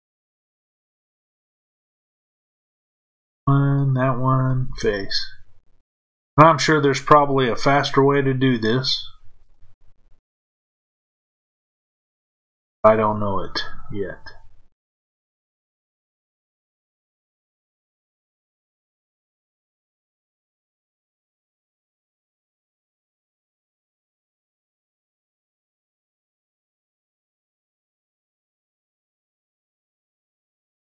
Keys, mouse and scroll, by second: 1.7 click, 3.7 shift+click, 4.6 f, 6.0 click, 9.4 shift+click, 10.2 f, 11.9 click, 15.3 shift+click, 16.0 f, 17.8 click, 19.7 shift+click, 20.6 f, 22.1 click, 24.3 shift+click, 25.2 f, 26.3 click, 27.8 shift+click, 29.7 shift+click.